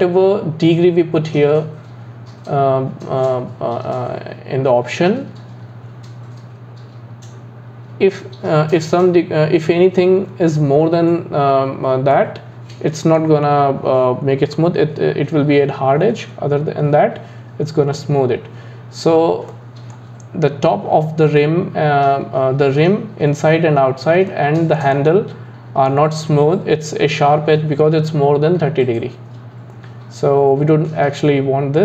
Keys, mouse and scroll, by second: 12.2-15.3 middle drag, 19.5-22.5 middle drag, 24.3-28.1 middle drag.